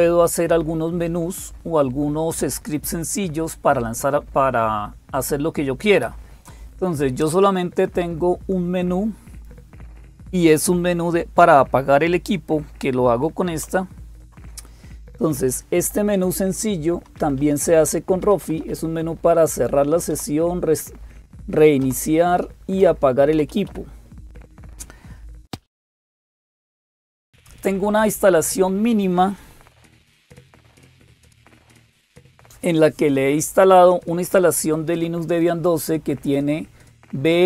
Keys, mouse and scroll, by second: 0.0-37.4 typing, 13.4 super+x, 16.7 Down, 17.0 Down, 21.6 Down, 21.6 Up, 22.6 Down, 23.1 Up, 23.3 Up, 23.5 Up, 27.3 super+Return.